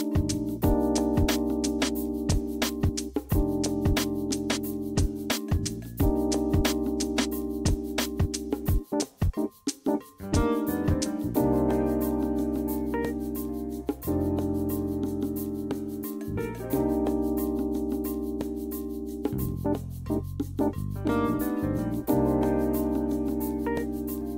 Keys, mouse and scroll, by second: 0.3 click, 0.6 click, 1.2 KP_5, 1.4 Return, 1.7 w, 2.6 shift+w, 4.3 shift+d, 5.8 q, 8.3 e, 11.2 click, 12.3 click, 13.1 click, 14.2-17.3 middle drag, 18.2 click, 19.3 click, 20.4 click, 21.0 click, 21.5 q, 24.0 e.